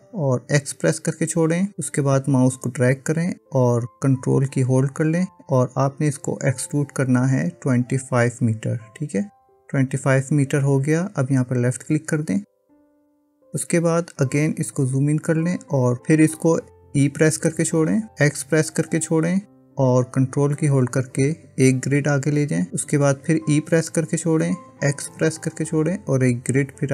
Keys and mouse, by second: 17.5 e, 24.1 e.